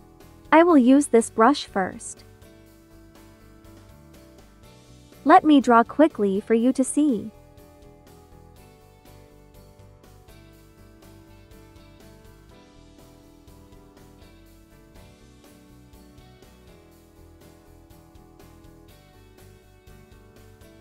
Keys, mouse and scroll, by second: 1.7 space, 1.8 click, 2.2 space, 2.4 click, 3.8 click, 4.8 ctrl+z, 5.1 space, 5.2 click, 5.6 space, 6.7 click, 7.9 click, 11.9 ctrl+z, 12.0 ctrl+click, 13.0-14.1 drag, 15.8 ctrl+z, 16.2-20.8 drag.